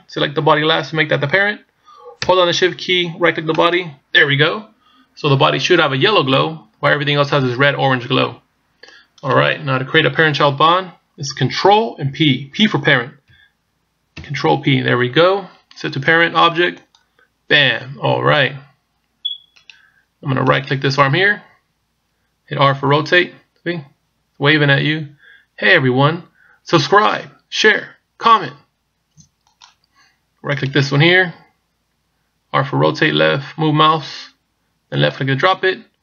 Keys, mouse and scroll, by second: 3.6 shift+right click, 14.2 ctrl+p, 19.6 right click, 20.6 right click, 22.8 r, 30.6 right click, 31.4 r.